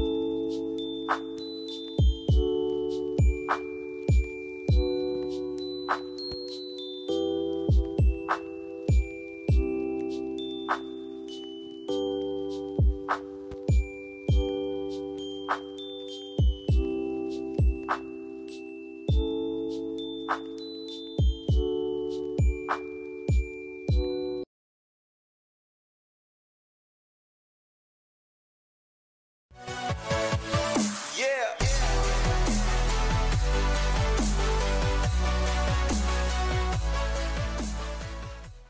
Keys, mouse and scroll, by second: 3.7-5.3 drag, 9.0 c, 9.7-10.9 drag, 11.9-12.5 shift+drag, 16.6 Down, 16.9 click, 17.7 F4, 19.6 click.